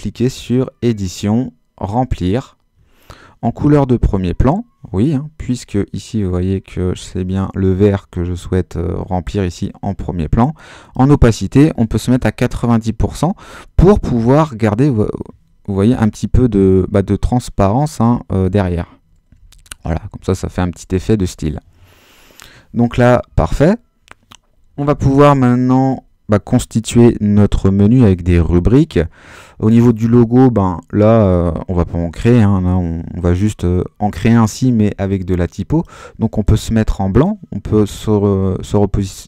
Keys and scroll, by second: 12.1 9, 12.4 0, 13.9 Return, 15.8 super++, 19.4 super+d, 19.8 super+-.